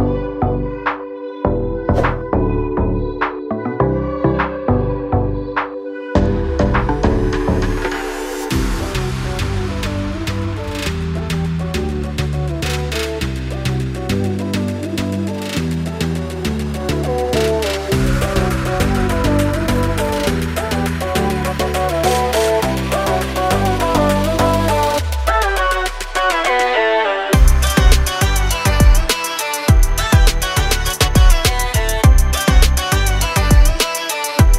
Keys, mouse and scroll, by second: 2.9 click, 3.1 double click, 4.4 click, 4.5 double click, 5.5 click, 5.7 double click, 7.3 click, 8.4 click, 10.4 click, 11.6 click, 14.5-15.2 scroll up 1, 15.2-16.1 scroll down 1, 16.1 click, 17.6-17.9 scroll up 1, 22.2 F8, 24.3 ctrl+a, 26.7 BackSpace, 29.5 h, 30.7 n, 33.3 click.